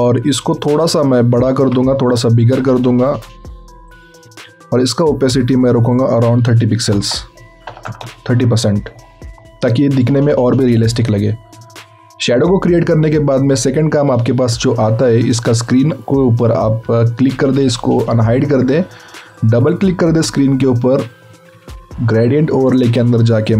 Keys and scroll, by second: 6.7 KP_3, 7.6 Delete, 7.6 KP_0, 7.8 Delete, 8.0 Delete.